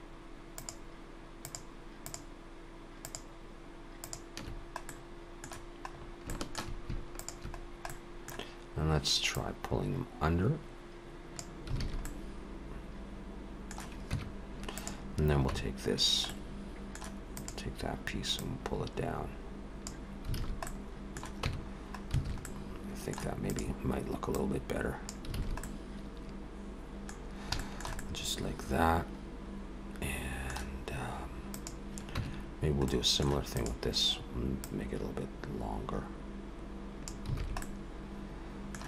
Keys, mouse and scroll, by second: 0.5 shift+click, 1.4 shift+click, 2.0 shift+click, 3.0 shift+click, 4.0 shift+click, 4.9 middle click, 5.9 scroll up 3, 6.3 shift+middle click, 7.2 shift+click, 7.6-8.2 scroll down 2, 7.9 middle click, 9.3 click, 11.8 alt+a, 12.0 middle click, 14.1 Tab, 14.7 click, 15.5 Tab, 16.3 middle click, 17.4 click, 18.4 click, 20.4 alt+a, 20.7 middle click, 21.4 Tab, 22.2 alt+a, 22.4 middle click, 23.5 click, 24.3 click, 25.4 alt+a, 25.6 middle click, 27.2 scroll down 2, 27.6 shift+middle click, 28.0 middle click, 31.5 click, 32.2 Tab, 32.9 middle click, 33.6 click, 34.6 click, 37.4 alt+a, 37.6 middle click.